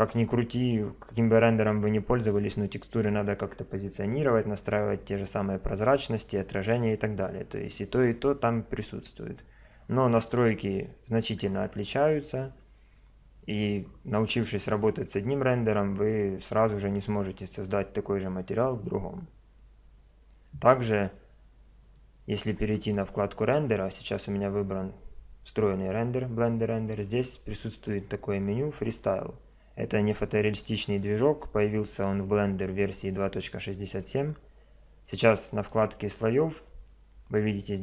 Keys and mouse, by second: 0.1 click, 21.8 click, 35.6 click.